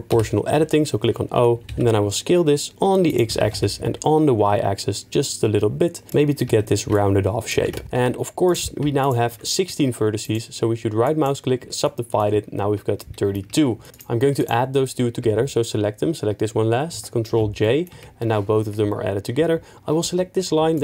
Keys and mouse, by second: 0.1 o, 3.1 s, 3.1 x, 3.3 s, 3.5 y, 6.5 Tab, 7.6 Tab, 7.8 2, 8.0 1, 10.2-11.8 right drag, 12.6 Tab, 13.0 middle click, 13.9 click, 14.4 shift+click, 16.9 ctrl+j, 17.6 middle click, 17.9 Tab.